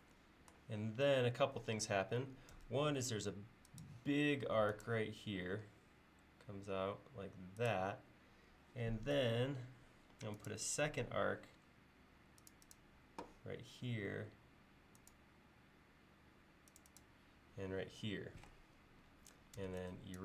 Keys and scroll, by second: 2.6 a, 9.2 a, 19.7 e.